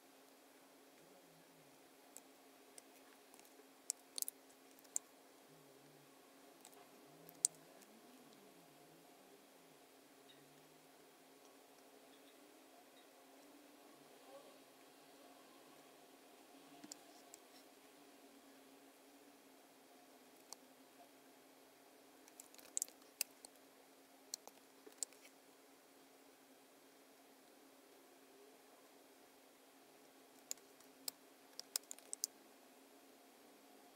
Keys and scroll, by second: 4.8 super+F9, 7.2 super+F9, 22.6 super+=, 22.9 space, 24.9 super+F9, 30.5 space, 31.6 space, 32.1 super+-.